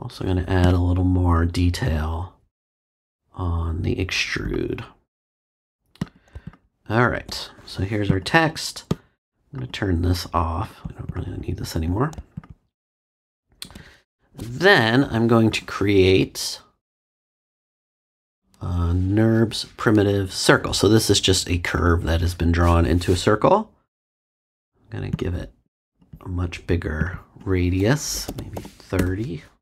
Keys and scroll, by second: 28.2 3, 28.5 0, 28.9 Return.